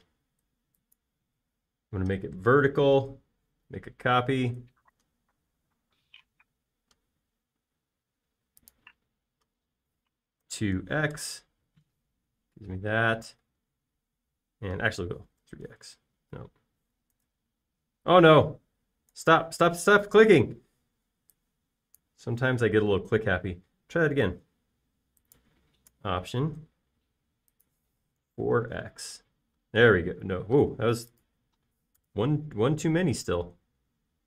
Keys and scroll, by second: 0.2 m, 3.0 Up, 11.6-12.6 typing, 14.6 space, 16.3-17.2 typing, 18.3 super+z, 20.4 x, 24.0 m, 29.5-31.1 typing, 33.3 BackSpace.